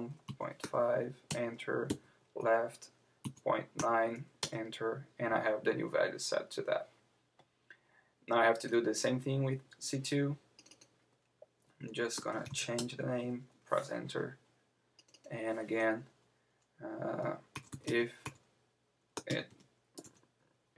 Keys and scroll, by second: 1.3 Return, 1.9 Left, 4.5 Return, 12.8 Return.